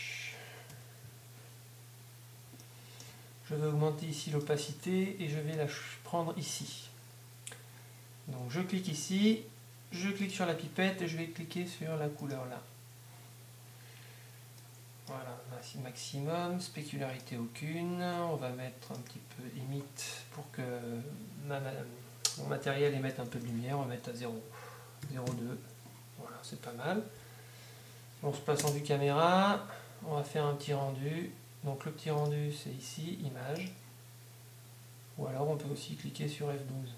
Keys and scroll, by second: 23.3 shift+., 25.4 Home.